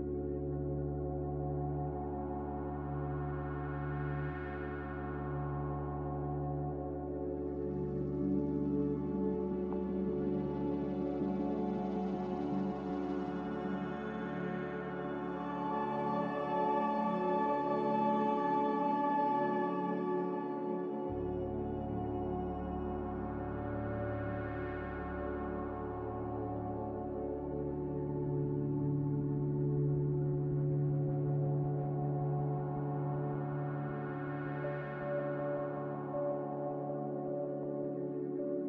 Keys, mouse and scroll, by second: 7.7 b, 25.8 n, 29.4 Escape, 29.5 Escape, 30.3 Escape, 30.5 Escape, 30.6 Escape, 31.2 Escape, 31.4 a, 34.2 b.